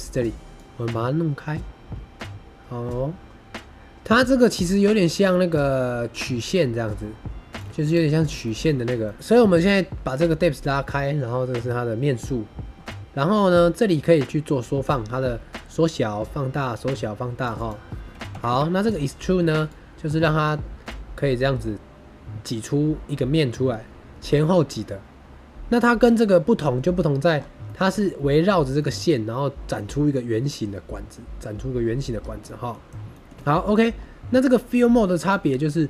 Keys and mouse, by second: 0.6-7.5 drag, 7.8 click, 8.3 shift+middle drag, 9.0 middle click, 13.8-17.4 drag, 17.5-18.9 drag, 19.7-25.9 shift+drag, 27.6 shift+middle click, 28.7 shift+middle drag, 28.8 shift+click, 28.9 click, 28.9 middle drag, 29.0 drag, 29.0-29.7 middle drag, 32.3 middle drag, 33.0 shift+middle drag, 33.3 middle click, 35.2-35.8 drag.